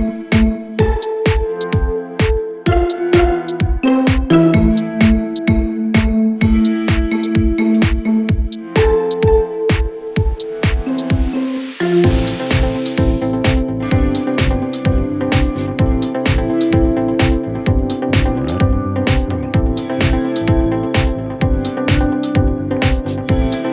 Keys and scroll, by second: 0.0-3.0 typing, 5.5 ctrl+k, 10.3-11.5 typing, 12.1 Down, 12.6 Return.